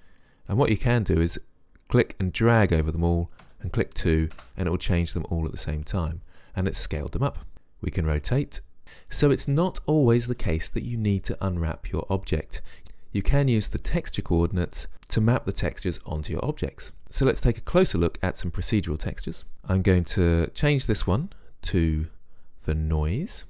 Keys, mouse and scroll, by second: 8.1 click, 19.1 click, 20.9 shift+s.